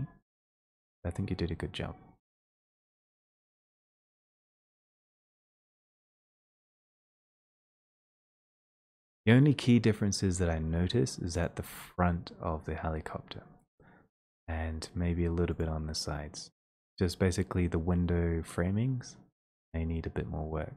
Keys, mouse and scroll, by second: 0.3 click, 3.6 click, 6.5 click.